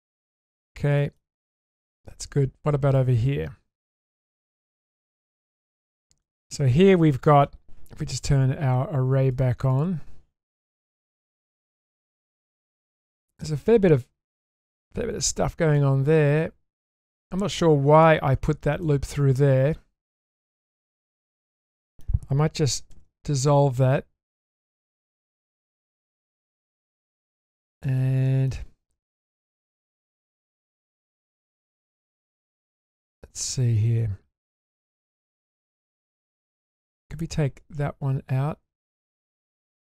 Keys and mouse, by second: 1.0 shift+middle click, 1.3 Tab, 1.8 Tab, 2.2-3.0 middle drag, 3.9-4.4 shift+middle drag, 4.7-5.2 middle drag, 5.4 shift+middle click, 6.2-7.4 middle drag, 9.7 click, 11.5-14.3 middle drag, 15.7-17.4 middle drag, 17.9 alt+click, 18.9-22.0 middle drag, 22.9 ctrl+x, 23.5-24.6 middle drag, 26.4-26.8 shift+middle drag, 27.1 middle click, 27.8-28.5 shift+middle drag, 30.2 click, 30.6-35.7 middle drag.